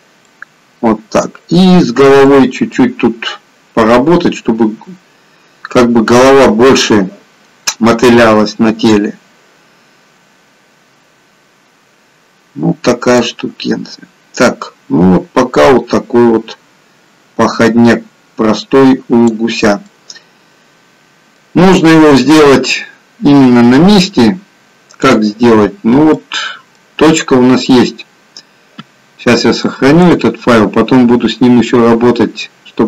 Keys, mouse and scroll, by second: 0.2 middle click, 2.8 middle click, 13.4 click, 19.7 middle click, 25.0 click, 25.6-26.1 scroll down 1, 26.1 middle click.